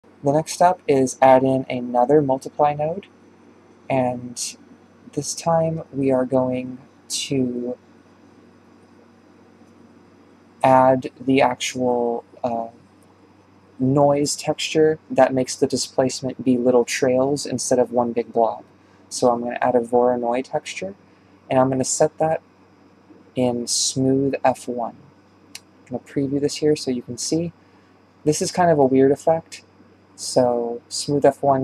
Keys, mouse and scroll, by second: 0.0 click, 1.0 shift+d, 3.2 click, 3.5-4.7 middle drag, 4.7 click, 5.4-7.6 middle drag, 7.6 click, 8.5 click, 9.2 click, 13.1 shift+right click, 14.1 g, 15.1 g, 16.4 click, 17.6 click, 20.8 BackSpace, 25.4 ctrl+shift+click, 26.9-27.4 ctrl+shift+drag, 27.4-27.8 scroll down 4, 27.8-28.1 shift+middle drag, 28.1-29.0 scroll up 6, 28.5 shift+middle click, 29.0-31.6 shift+middle drag.